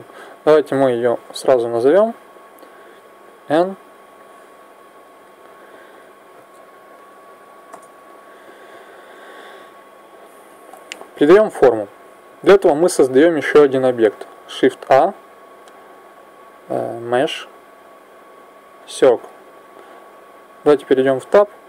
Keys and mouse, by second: 2.1 middle click, 2.3 middle click, 2.8 n, 4.1-6.9 drag, 9.5 n, 14.7 shift+a, 20.6 Tab.